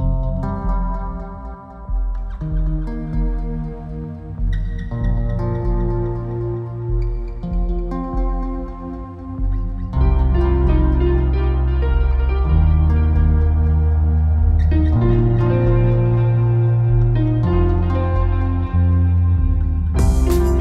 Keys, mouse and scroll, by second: 3.8 scroll up 1, 5.1 click, 5.7 click, 5.7 KP_4, 6.0-6.4 scroll down 1, 8.7 scroll up 1, 10.2 click, 12.3 click, 12.8 click, 14.2 shift+d, 15.3-17.6 drag, 18.5-20.6 drag.